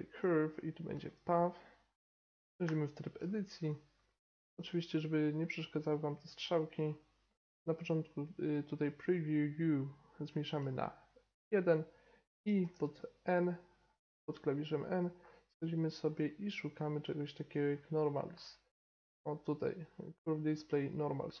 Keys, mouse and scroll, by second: 2.6 Tab, 4.0 middle click, 5.1-6.9 drag, 7.3-11.4 drag, 12.6 n, 13.9-21.4 middle drag.